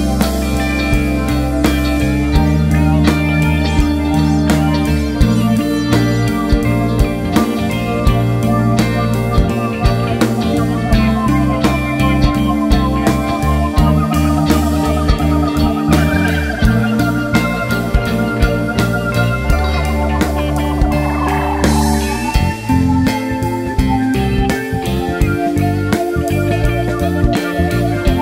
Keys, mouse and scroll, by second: 2.6 `, 3.4 click, 4.1 ctrl+a, 4.6 click, 4.9 ctrl+a, 5.3 click, 5.7 r, 6.3 right click, 6.5 `, 7.6 click, 11.6-13.0 drag, 11.6 `, 12.4 scroll up 1, 12.7 alt+a, 15.9 `, 16.2 scroll up 1, 16.4 `, 16.9 g, 18.2 right click, 18.7-20.7 drag, 19.3 scroll down 2, 19.4 alt+a, 19.5 `, 22.7-24.2 drag, 23.1-23.4 scroll down 2, 23.4 Tab, 25.0 `, 25.5 alt+shift+click, 25.8 e, 26.5 KP_1.